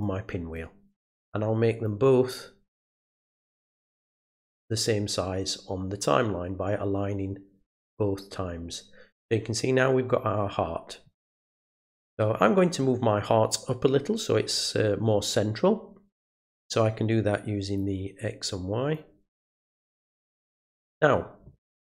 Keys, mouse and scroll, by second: 0.5-1.8 drag, 2.9 right click, 4.1 click, 7.7 click, 17.8-18.9 drag, 19.5-20.7 drag.